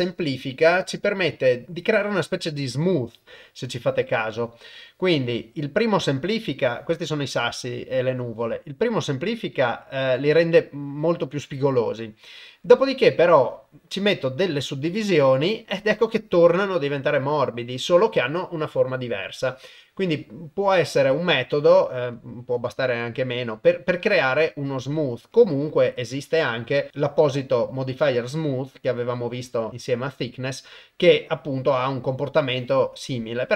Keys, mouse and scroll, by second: 22.2 click, 26.4-32.7 drag.